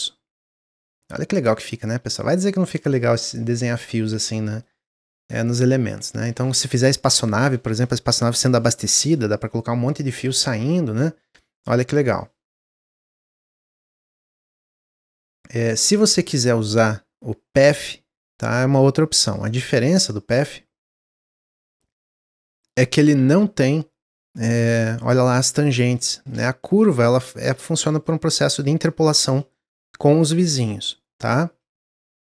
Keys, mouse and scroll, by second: 0.2-1.4 middle drag, 1.4 drag, 1.7-2.1 scroll down 1, 2.1-6.6 shift+middle drag, 10.3-14.3 middle drag, 14.3 click, 14.6 middle drag, 14.9-15.3 scroll up 2, 15.3-15.9 scroll down 1, 15.9-19.1 drag, 19.7-20.4 middle drag, 20.4 click, 21.4-22.3 shift+middle drag, 22.3 click, 22.7 shift+middle click, 23.1 Tab, 23.5 middle click, 24.2 click, 25.7 click, 26.0 shift+middle click, 26.2 scroll up 1, 26.5 middle click, 27.1 click, 28.2 click, 29.0-30.8 middle drag, 30.8 click.